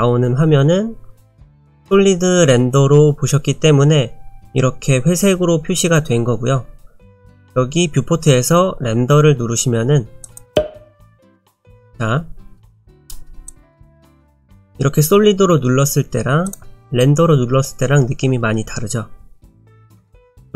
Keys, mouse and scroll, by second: 10.4 click, 13.5 click, 16.5 click, 19.8 click, 20.1 middle click.